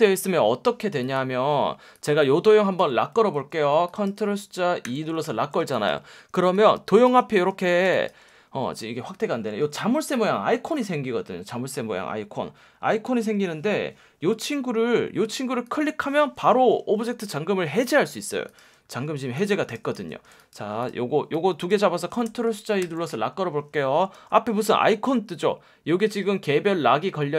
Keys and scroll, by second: 3.2 super+z, 3.6 space, 4.9 super+2, 5.6 space, 6.6 super+space, 8.2 super+space, 9.5 F1, 13.2 F1, 19.9 super+z, 20.2 space, 22.8 super+2, 24.1 F1, 26.1 F1.